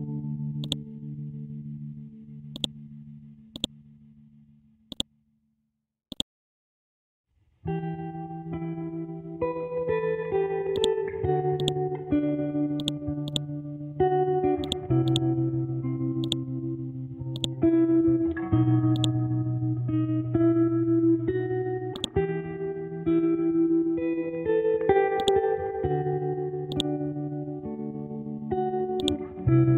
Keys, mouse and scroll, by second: 7.7-8.6 scroll down 1, 8.6-10.4 scroll up 1, 24.2-25.2 scroll down 1, 25.2 click, 26.1-26.7 scroll up 1, 26.7 click, 27.5-29.0 scroll up 1, 29.0-29.7 drag.